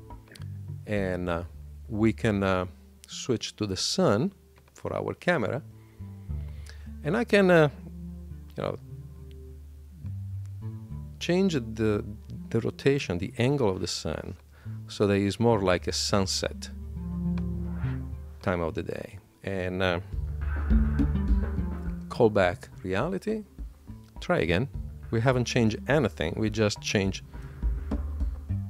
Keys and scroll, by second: 0.7 Escape, 21.8 shift+super+l.